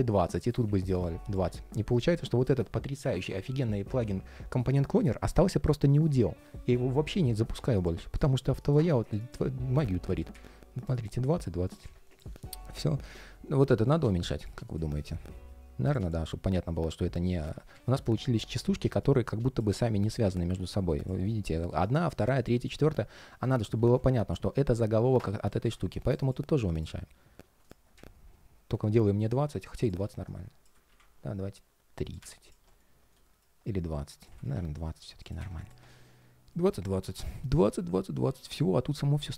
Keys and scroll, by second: 13.9 ctrl+shift+4, 30.6 super+z, 34.3 super+z.